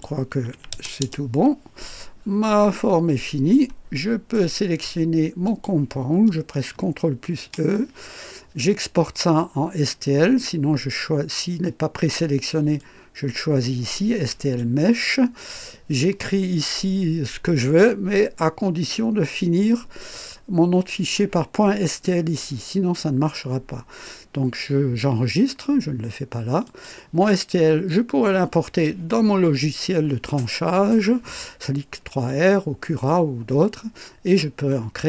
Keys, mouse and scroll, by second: 0.5 KP_6, 0.7 KP_0, 1.0 Return, 2.4-3.7 drag, 3.9 right click, 5.4 click, 7.2 ctrl+e, 12.7 click, 26.6 click.